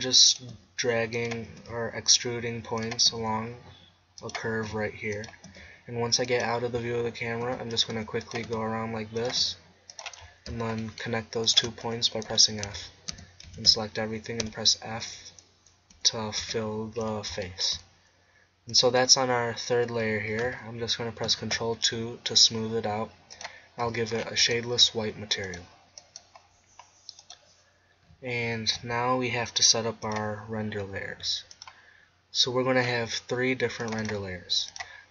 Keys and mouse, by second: 0.5 e, 1.6 e, 3.1 e, 4.7 e, 5.5 e, 7.5 e, 8.0 e, 8.5 e, 9.4 e, 11.5 middle click, 12.3 f, 12.7 Tab, 13.2 Tab, 13.5 a, 13.7 a, 14.5 f, 16.0 f, 16.4 Tab, 21.3 ctrl+2, 28.9-30.1 middle drag, 33.8-35.1 drag.